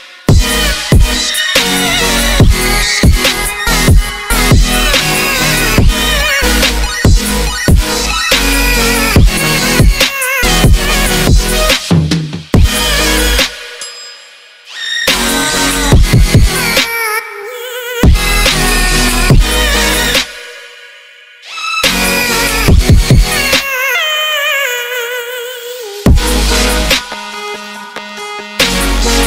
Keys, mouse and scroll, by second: 0.3 click, 0.5 click, 0.6-1.0 ctrl+middle drag, 1.0 click, 1.2-1.7 middle drag, 1.7 click, 2.2 middle click, 2.5 click, 2.7-3.3 middle drag, 3.6 click, 5.3 click, 6.3-7.3 drag, 7.3 ctrl+middle click, 8.1 click, 8.7 click, 9.2 middle click, 9.5 click, 9.9-10.8 ctrl+middle drag, 10.9 click, 11.5-13.1 middle drag, 13.7 middle click, 13.9 ctrl+s, 14.0-16.0 ctrl+middle drag, 16.0 click, 16.3 middle drag, 16.5 click, 18.2 click, 19.1 middle click, 19.5 click, 19.7 click, 19.8-20.3 ctrl+middle drag, 20.3 click, 20.5 s, 21.3 click, 21.5-22.1 middle drag, 22.7 click, 22.7-23.4 middle drag, 23.6 Tab, 23.7 middle click, 24.2 click, 24.5 click, 24.6 middle click, 25.9 click, 26.1 ctrl+s, 26.3 middle click, 26.5 Tab, 26.8 middle click, 27.1 click, 27.3-28.5 middle drag, 28.5 click, 28.9-29.2 ctrl+middle drag.